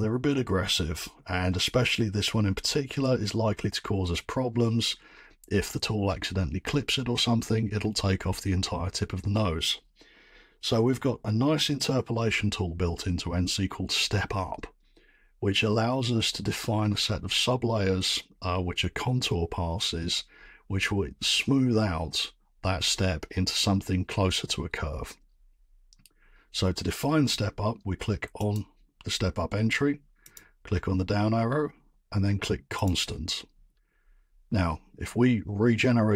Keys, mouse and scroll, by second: 28.5 click, 30.3 click, 32.8 click.